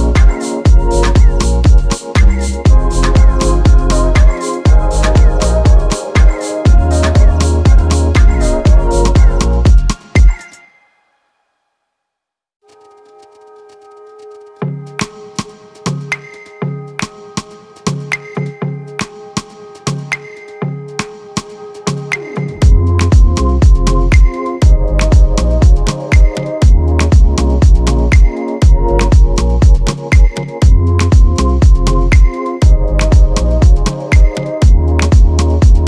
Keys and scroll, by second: 13.3 ctrl+d.